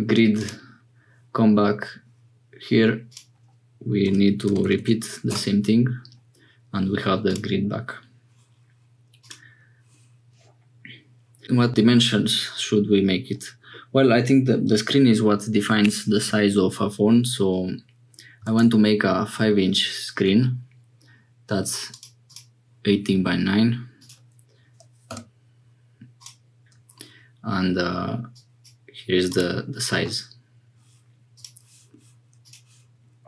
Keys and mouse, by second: 0.4-6.9 drag, 4.6 0.